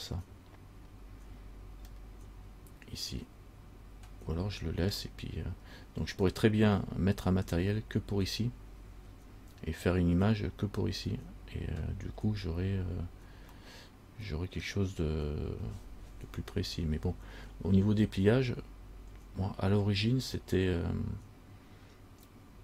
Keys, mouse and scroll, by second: 2.1 middle click, 5.1 scroll down 1, 13.8 middle click.